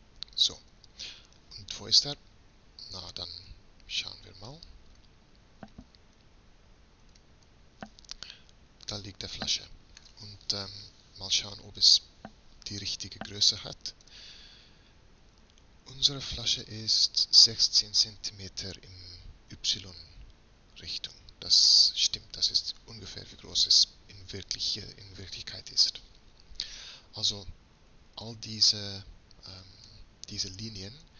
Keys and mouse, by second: 0.0-3.5 drag, 3.5 b, 7.2 KP_Decimal, 9.1-10.4 drag, 14.1 n, 28.0 a, 28.8 b.